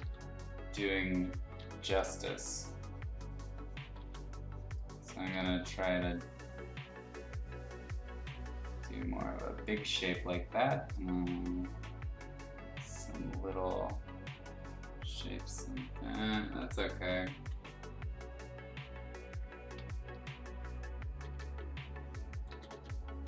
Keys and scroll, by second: 3.9 x, 5.3 ctrl+z, 20.0 ], 20.2 ], 21.1 ], 22.4 ctrl+z, 22.7 x.